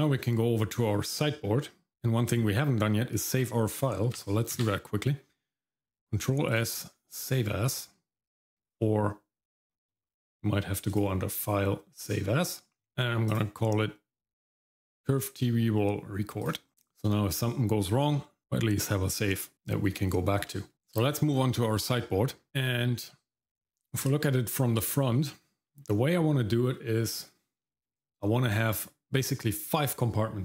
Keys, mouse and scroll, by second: 4.6 ctrl+s, 10.9-12.2 drag, 16.7 shift+middle click, 20.0 shift+middle click, 20.7 Tab, 20.7-21.6 scroll down 1, 22.4 scroll up 1, 22.5 shift+middle click, 22.5 scroll down 1, 22.8 middle click, 23.6 `, 24.3-24.8 scroll down 2, 24.8 middle click, 25.7 middle click, 26.1-27.8 scroll up 1.